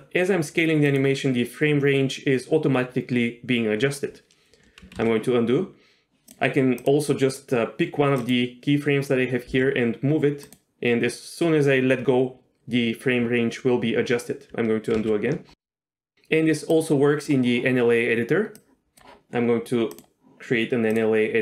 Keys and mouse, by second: 1.0-2.2 drag, 1.0 s, 5.1 ctrl+z, 6.3 click, 6.8 click, 8.3-9.2 drag, 9.5 g, 10.5-11.2 drag, 15.0 ctrl+z, 16.7 click, 18.7 click, 19.9-21.0 drag.